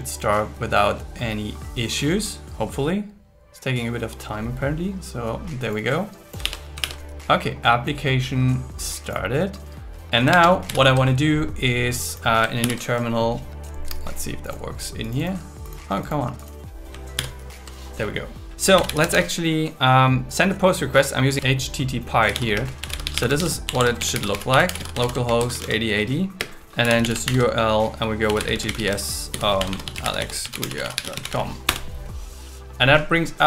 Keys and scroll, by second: 6.4 super+1, 7.8 super+1, 10.6 ctrl+Tab, 12.6 super+n, 17.2 super+t, 21.3 space, 22.5 space, 23.7 shift+7, 25.0 shift+., 26.4 space, 27.3 shift+0, 29.3 shift+., 29.6 shift+7, 31.7 Return.